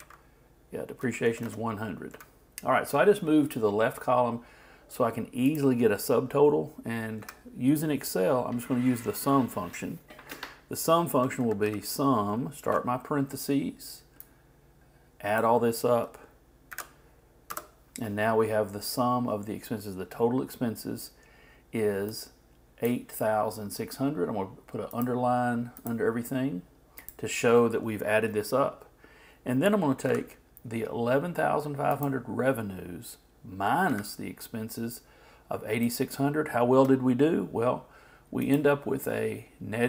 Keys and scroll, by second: 0.0 alt+Right, 12.3 shift+m, 12.6 shift+9, 16.7 shift+0, 17.5 shift+Return.